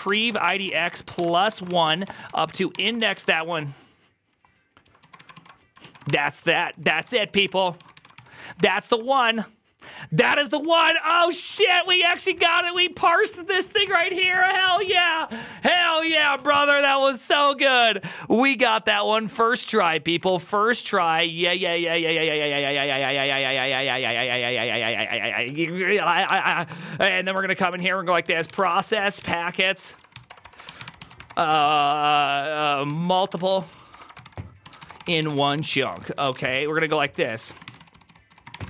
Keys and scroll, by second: 0.0-3.9 typing, 1.5 ctrl+c, 1.6 ctrl+c, 4.9 ctrl+a, 5.1-8.3 typing, 5.2 ctrl+u, 5.7 ctrl+a, 6.1 ctrl+c, 6.3 ctrl+c, 8.7 Up, 8.8 Return, 10.3 ctrl+a, 10.5-13.1 typing, 10.6 ctrl+c, 11.1 ctrl+c, 12.3 Return, 19.0 alt+{, 19.3-38.6 typing.